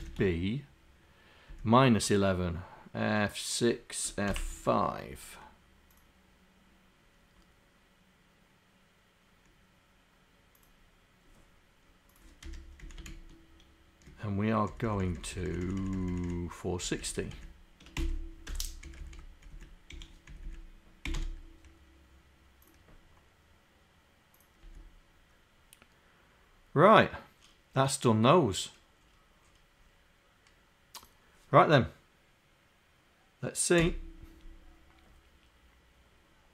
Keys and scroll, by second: 0.1 shift+b, 1.5 Down, 4.3 BackSpace, 4.6 5, 12.5 Home, 12.8 Down, 14.7 shift+Down, 15.2 shift+Down, 15.8 shift+Down, 16.4 shift+Down, 17.0 shift+Down, 18.1 Delete, 19.5 Down, 19.9 End, 20.3 Down, 21.1 Delete, 24.7 Down, 33.8 F5.